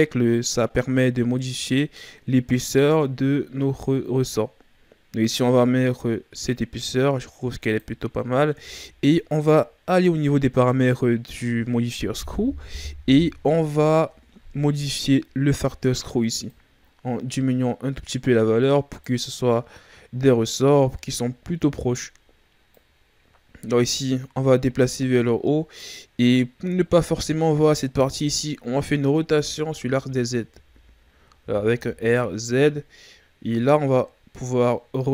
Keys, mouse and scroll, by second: 8.5 Tab, 16.4 click, 19.6-20.8 scroll down 3, 20.8-22.4 scroll up 4, 22.7 click, 29.2 e, 29.8 z, 30.5 z, 31.4 r.